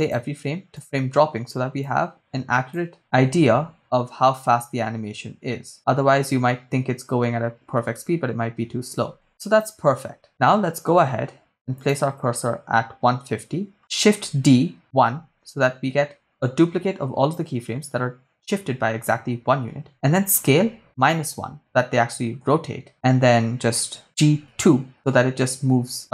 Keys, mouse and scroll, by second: 1.2 drag, 2.2-3.0 drag, 3.3 shift+space, 9.1 shift+space, 9.3-10.6 drag, 12.0 click, 14.2 shift+d, 15.1 1, 16.0 Return, 20.3 s, 21.1 -, 21.3 1, 22.4 Return, 24.0 ctrl+z, 24.0 g, 24.4 2.